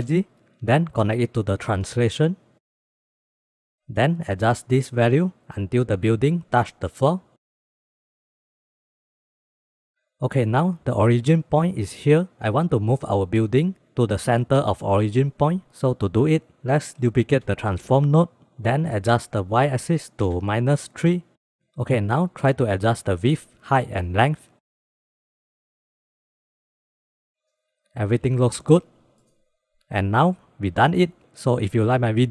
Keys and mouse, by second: 1.6-2.3 drag, 3.2-3.7 middle drag, 4.3 click, 4.6-5.4 drag, 5.6 KP_1, 6.5 shift+click, 6.6 shift+middle click, 6.7 shift+click, 8.2 click, 9.5 middle click, 15.8 click, 17.0 shift+d, 19.3-21.6 drag, 22.9 click, 23.1 click, 25.0 click, 27.0 click, 29.2 click, 29.4 click, 29.8 ctrl+s.